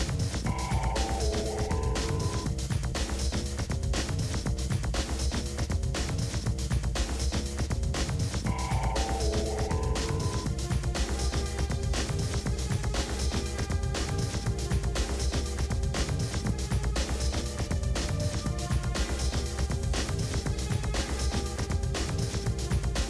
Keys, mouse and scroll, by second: 0.2-0.6 scroll up 4, 0.6 shift+middle click, 1.1 g, 2.3 KP_1, 2.5 KP_3, 2.8 scroll down 4, 2.9-4.4 shift+middle drag, 4.4 click, 4.7-5.1 scroll up 1, 5.1 s, 5.9 g, 6.7 click, 7.1 l, 8.0 click, 8.3 l, 8.5 shift+d, 9.9 g, 10.9 click, 12.0 y, 12.4 g, 12.8 Left, 13.9-14.5 scroll up 8, 14.5 g, 15.4 KP_7, 15.6 KP_Decimal, 16.0 g, 17.9-18.6 scroll down 12, 18.6-19.3 scroll up 18, 19.3 g, 21.2 scroll down 7, 21.4 middle click, 22.3-22.9 scroll down 5, 22.3 l, 22.6 KP_7, 22.9 shift+middle click.